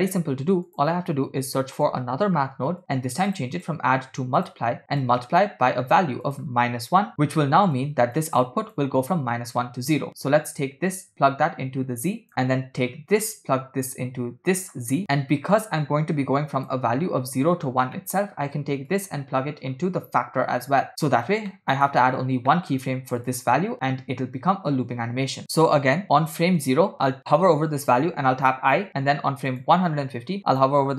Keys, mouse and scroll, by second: 0.1 shift+a, 3.6 click, 5.0-6.1 drag, 6.2 click, 7.8 click, 8.5 click, 10.6-12.3 drag, 12.3 middle click, 13.1-15.0 drag, 15.5-16.7 drag, 18.0 middle click, 18.9-21.0 drag, 21.6 middle click, 22.6 middle click, 22.9-23.2 scroll up 2, 23.3 click, 25.6 middle click, 25.6-26.6 scroll up 3, 26.6 click, 28.4 i, 29.5 click, 30.5-30.9 drag.